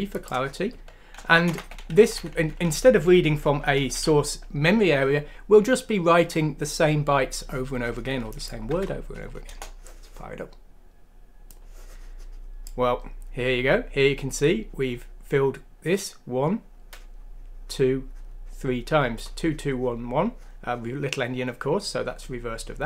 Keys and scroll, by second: 1.4 BackSpace, 1.5 3, 2.0 Down, 2.1 Down, 2.3 Down, 2.4 Down, 2.6 Down, 3.2 Home, 4.0 ;, 8.7 F6, 9.5 Return.